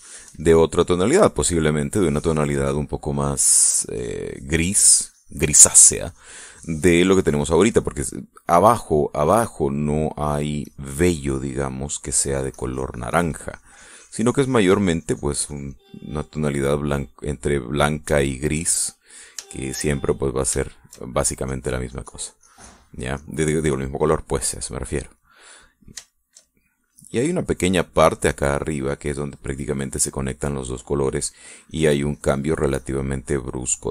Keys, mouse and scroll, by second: 0.4 shift+middle click, 1.3 middle click, 2.0 middle click, 2.8-3.1 scroll down 1, 4.2 click, 4.5-8.5 drag, 8.8-9.8 middle drag, 10.4 middle click, 11.2 click, 12.2 middle click, 13.3-17.0 drag, 16.4 middle click, 17.3-18.3 middle drag, 18.8-19.9 shift+middle drag, 20.0 shift+middle click, 21.2 shift+middle click, 22.1-24.0 shift+drag, 25.0 middle click, 26.1-27.5 middle drag, 27.8-31.1 shift+drag, 31.4-33.9 drag.